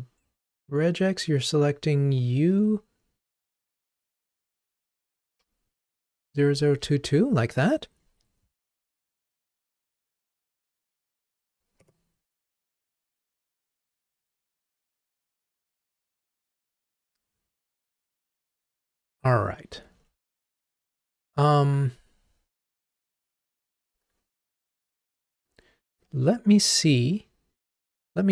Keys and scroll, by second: 20.0 ctrl+Tab.